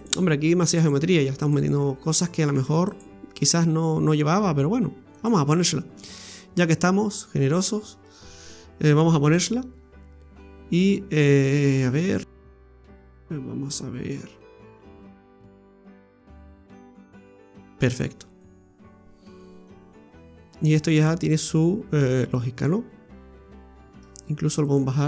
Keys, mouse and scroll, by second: 1.1 ctrl+r, 2.5 ctrl+r, 5.5-5.9 scroll down 3, 5.9 middle click, 7.5 click, 9.3 Tab, 15.6 KP_Divide, 16.4-16.8 scroll down 2, 16.8 middle click, 17.2 right click, 17.6 scroll down 1, 17.8 middle click, 24.6 right click.